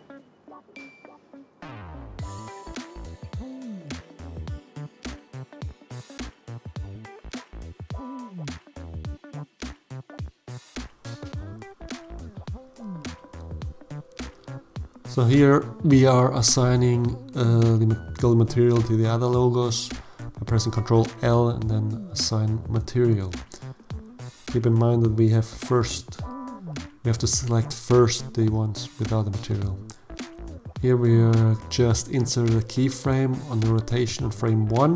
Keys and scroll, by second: 17.0 ctrl+l, 20.0 alt+a, 28.0 i, 33.6 Right.